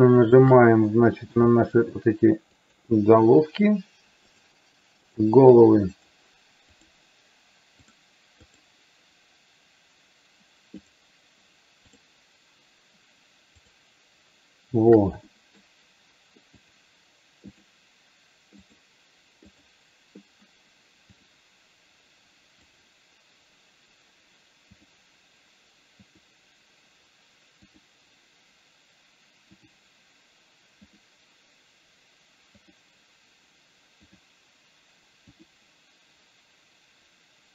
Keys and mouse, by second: 0.9 middle click, 2.8 shift+click, 4.4 shift+click, 5.9 shift+click, 6.9 shift+click, 7.9 shift+click, 8.5 shift+click, 10.9 shift+click, 13.7 shift+click, 15.3 shift+middle click, 16.5 shift+click, 17.5 shift+click, 19.5 shift+click, 21.4 shift+click, 22.8 shift+click, 24.9 shift+click, 26.3 shift+click, 29.7 shift+click, 34.0 shift+click, 35.3 shift+click.